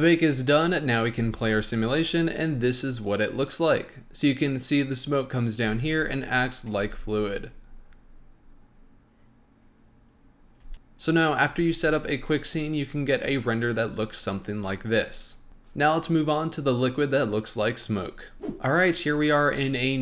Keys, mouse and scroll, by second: 1.2 space, 5.6 space, 6.4 drag, 6.7 space, 10.6 space, 10.7 click, 11.5 space, 18.6-19.4 middle drag.